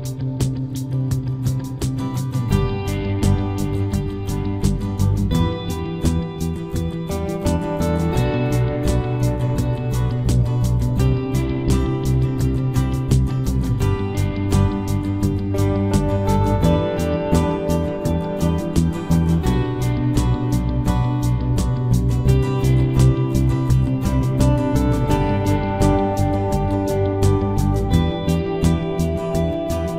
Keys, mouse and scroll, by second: 13.2-14.9 right drag, 13.8 c, 14.9 middle click, 15.4-17.1 drag, 15.4-18.9 right drag, 17.5 ctrl+r, 18.9 ctrl+Tab, 19.9-21.8 drag, 20.2 c, 24.0-25.9 right drag, 24.4 c.